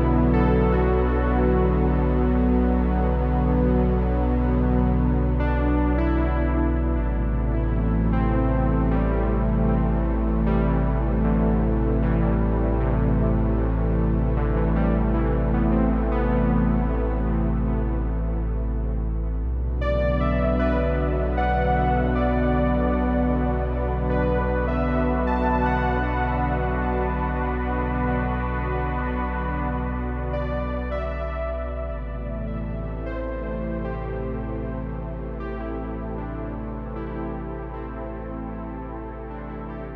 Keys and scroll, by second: 0.8 Tab, 1.0-1.8 typing, 1.3 Tab, 3.7 super+i, 5.1 Tab, 5.3 typing, 8.1 Tab, 8.3 typing, 9.0 Tab, 10.3 Tab, 17.5 super+c, 20.7 typing, 25.7 s, 26.9 g, 28.3 g, 35.9-38.6 typing.